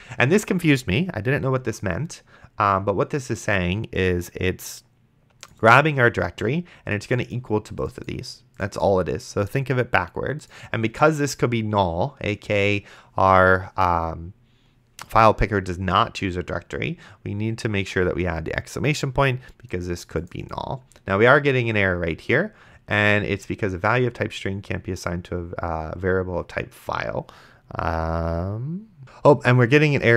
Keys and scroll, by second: 29.0 ctrl+z.